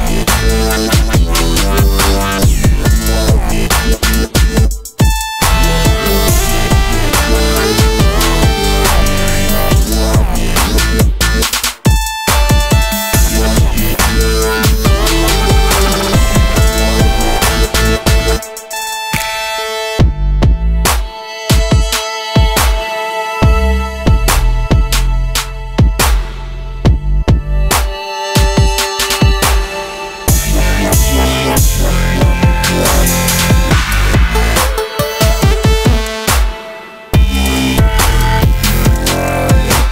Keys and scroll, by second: 12.5 space, 13.2 space, 14.9 space, 15.9 ctrl+s, 21.8 space, 22.7 space, 23.7 space, 23.8 ctrl+alt+7, 24.6 Delete.